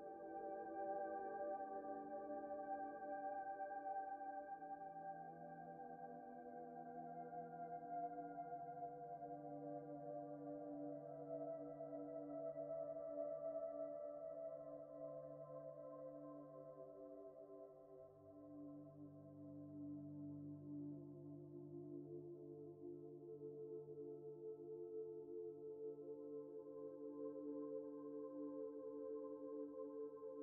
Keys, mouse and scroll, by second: 0.0 scroll up 1, 0.6 scroll up 1, 1.0 shift+middle click, 6.8 shift+middle click, 14.4 alt+shift+click, 15.0 ctrl+z, 15.9 alt+shift+click, 16.4 middle click, 16.9 scroll down 1, 17.2 middle click, 18.8 `, 19.3 middle click, 20.7 scroll down 1, 20.8 scroll up 1, 22.3 Tab, 22.9 middle click, 23.8 middle click, 25.0 ctrl+click, 25.8 ctrl+click, 26.4 ctrl+click, 27.1 middle click, 27.3-27.6 scroll up 1, 27.7 shift+middle click, 28.5 ctrl+click, 29.4 scroll down 1, 29.6 alt+z, 29.9 middle click.